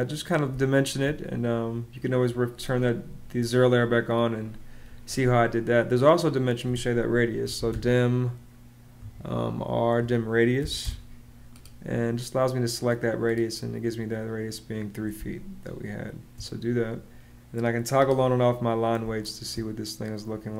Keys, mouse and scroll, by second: 0.3 space, 7.0-8.7 typing, 10.3 Down, 10.6 Return, 14.9 space, 18.8 space.